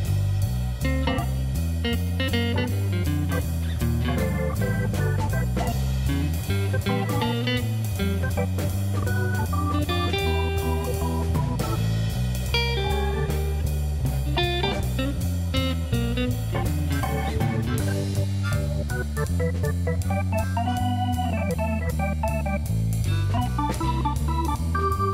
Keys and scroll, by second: 3.8 Tab, 20.9 Return.